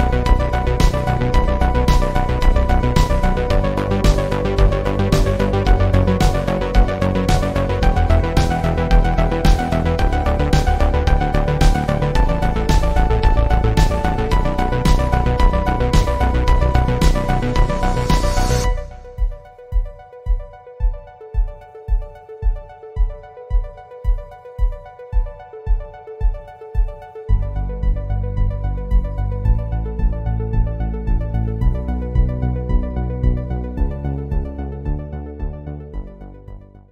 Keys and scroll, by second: 17.4 Return, 19.1 alt+Right, 20.6 Return.